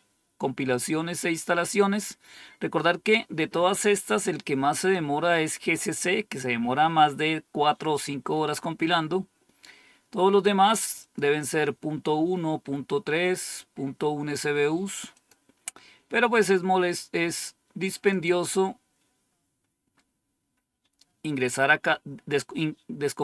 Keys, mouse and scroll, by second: 9.2-9.9 scroll down 2, 9.9-10.9 scroll down 1, 10.9 click, 15.0 click, 18.0 click, 19.3-20.8 scroll down 6.